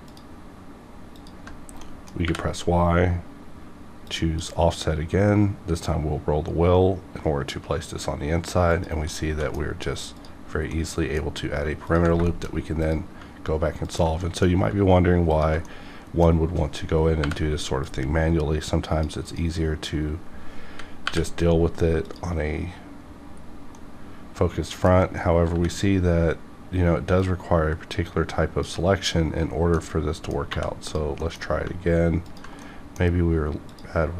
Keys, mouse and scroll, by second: 0.1 ctrl+click, 0.1 ctrl+click, 1.8 scroll up 1, 1.9 middle click, 2.3 y, 4.0-7.5 drag, 5.7-7.5 scroll, 7.5 scroll up 1, 8.8 click, 9.1 middle click, 9.1 middle click, 10.1 click, 10.7 middle click, 11.8 ctrl+click, 12.4 ctrl+shift+middle click, 12.8 shift+click, 13.8 shift+click, 14.2 middle click, 15.3 ctrl+click, 15.6 ctrl+middle click, 16.6 scroll up 1, 17.1 y, 17.7-19.2 drag, 21.0 y, 22.0 click, 23.7-25.1 middle drag, 25.1 scroll up 1, 25.4 y, 27.1-29.5 drag, 29.5 scroll down 1, 29.7 middle click, 30.5 2, 30.8 click, 31.2 middle click, 32.2 ctrl+click, 32.6 middle click, 33.7 ctrl+click.